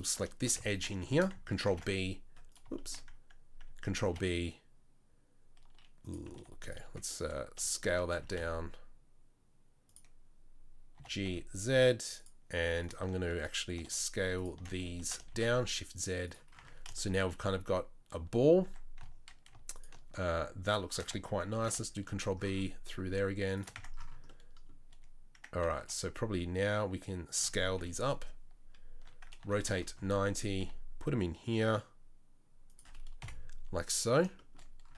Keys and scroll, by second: 1.7 ctrl+b, 4.1 ctrl+b, 8.1 s, 11.0 g, 15.0 s, 16.6 Tab, 18.6 Tab, 21.6 ctrl+b, 23.8 Tab, 25.8 s, 27.8 KP_3, 29.4 r, 30.6 g, 33.2 KP_7.